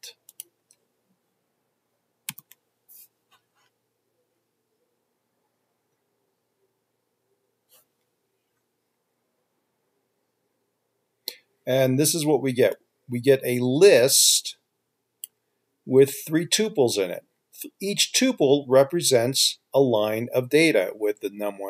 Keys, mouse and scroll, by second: 2.5 ctrl+F5.